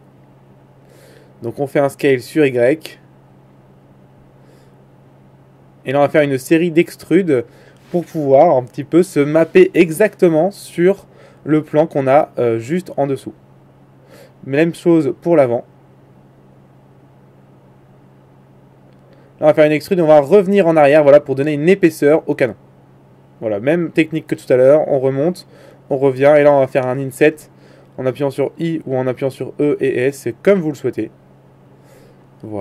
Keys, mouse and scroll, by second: 0.1 s, 1.9 s, 1.9 s, 6.3-8.2 right drag, 8.2 e, 9.5 s, 11.0 e, 12.7 e, 15.1 middle click, 16.5-19.3 right drag, 19.3 g, 21.1 e, 22.8 e, 23.1 click, 23.2 right click, 24.6 e, 26.0 e, 27.2 e.